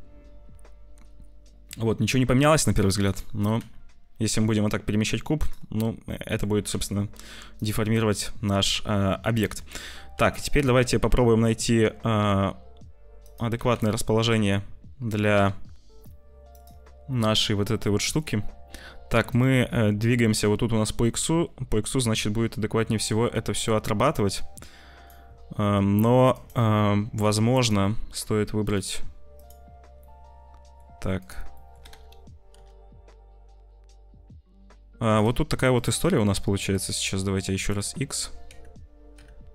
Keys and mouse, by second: 3.0 click, 3.3 g, 6.1 click, 6.4 g, 9.4 r, 10.7 g, 13.5 g, 16.5 g, 19.2 click, 20.9 click, 22.9-25.0 drag, 27.5 click, 28.6 click, 30.1 click, 31.6-35.1 drag, 31.6 g, 36.6 click, 37.6 click, 38.0 g.